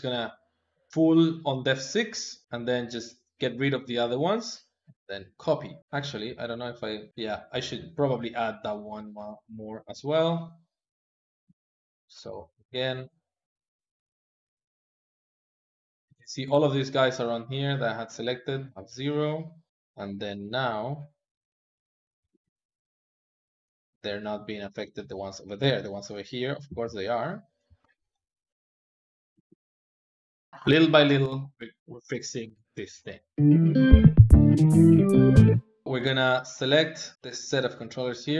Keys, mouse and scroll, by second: 0.6-6.4 drag, 6.4 Tab, 7.0-9.5 middle drag, 9.5 click, 9.9-11.0 middle drag, 11.0 ctrl+click, 11.3 middle click, 11.4 ctrl+z, 11.9 click, 12.1 click, 12.2 middle click, 12.6 click, 12.8 click, 13.0 middle click, 13.7 click, 14.2 ctrl+shift+click, 14.5 middle click, 14.9 ctrl+shift+click, 15.1 middle click, 15.4 ctrl+shift+click, 15.7 middle click, 15.8 ctrl+z, 16.3 ctrl+shift+click, 16.5 middle click, 17.0 ctrl+shift+click, 17.2-18.7 middle drag, 18.8 click, 19.0 middle click, 19.3 Tab, 19.5 middle click, 20.1 click, 20.8 click, 21.4 click, 22.2 g, 24.8-26.5 middle drag, 26.5 g, 27.9 middle click, 28.5 click, 29.2 g, 30.5 Escape, 35.8-37.1 ctrl+middle drag, 37.1 click.